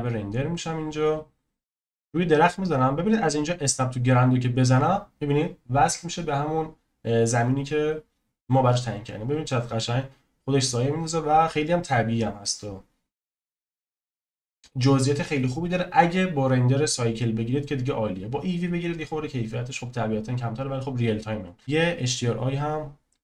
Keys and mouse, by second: 9.2 click, 21.6 n.